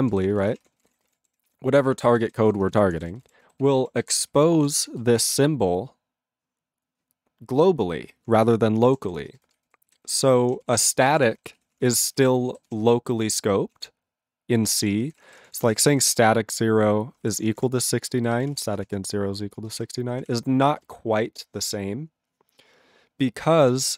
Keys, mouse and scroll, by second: 0.0 ctrl+p, 0.1 ctrl+g, 0.2 ctrl+e, 0.2 ctrl+n, 0.3 ctrl+n, 0.4 ctrl+e, 0.5 ctrl+space, 0.6 ctrl+a, 0.6 ctrl+p, 0.8 ctrl+p, 0.8 ctrl+g, 0.9 ctrl+e, 0.9 ctrl+n, 1.1 ctrl+e, 1.5 ctrl+s, 1.9 ctrl+space, 1.9 ctrl+a, 2.0 ctrl+p, 2.1 ctrl+p, 2.2 ctrl+g, 2.3 ctrl+e, 2.3 ctrl+n, 2.4 ctrl+n, 2.5 ctrl+e, 2.7 ctrl+space, 2.7 ctrl+a, 2.7 ctrl+p, 2.9 ctrl+p, 2.9 ctrl+g, 3.0 ctrl+e, 3.0 ctrl+n, 3.2 ctrl+n, 3.2 ctrl+e, 3.6 ctrl+s, 3.8 ctrl+a, 4.2 alt+f, 4.3 alt+f, 4.9 ctrl+space, 5.2 ctrl+alt+b, 8.5 ctrl+g, 9.1 ctrl+s, 9.2 ctrl+space, 9.6 ctrl+alt+f, 9.7 ctrl+g, 10.1 ctrl+s, 10.4 ctrl+p, 10.7 ctrl+space, 10.8 ctrl+n, 10.9 ctrl+e, 11.2 ctrl+g, 11.6 ctrl+s, 11.8 ctrl+a, 11.9 ctrl+p, 12.0 ctrl+space, 12.0 ctrl+e, 12.0 ctrl+n, 12.2 ctrl+n, 12.3 ctrl+g, 12.7 ctrl+s, 13.9 ctrl+a, 14.7 ctrl+o, 14.8-19.1 typing, 19.6 ctrl+space, 19.6 ctrl+n, 19.7 ctrl+n, 20.2 ctrl+p, 20.3 ctrl+p, 20.7 ctrl+n, 20.8 ctrl+n, 23.8 ctrl+g, 23.9 ctrl+p.